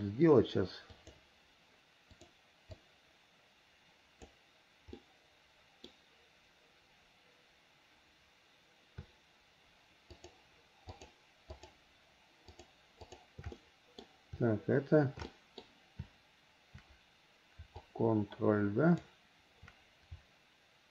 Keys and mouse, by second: 1.2 click, 2.3 click, 3.0-4.5 drag, 5.1 middle click, 10.3 shift+click, 11.7 shift+click, 12.6 shift+click, 13.2 shift+click, 13.7 middle click, 15.5 middle click, 17.9-19.3 ctrl+drag.